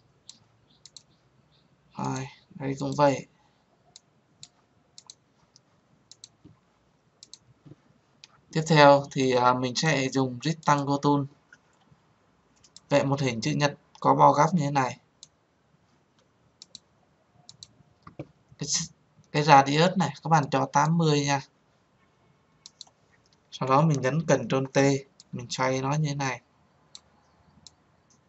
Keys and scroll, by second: 24.9 ctrl+t.